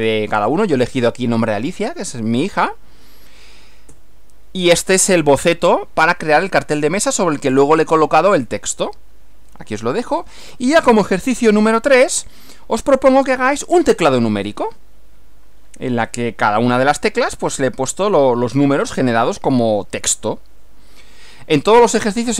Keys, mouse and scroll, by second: 4.0 Right, 12.2 Right.